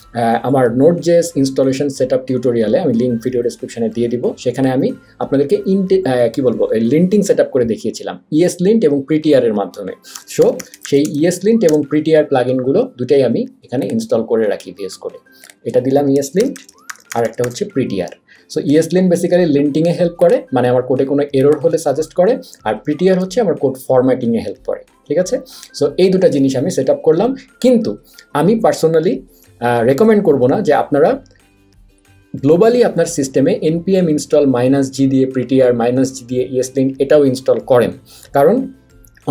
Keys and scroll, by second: 9.9-11.7 typing, 16.1-17.9 typing, 21.8 super+a, 23.1 BackSpace.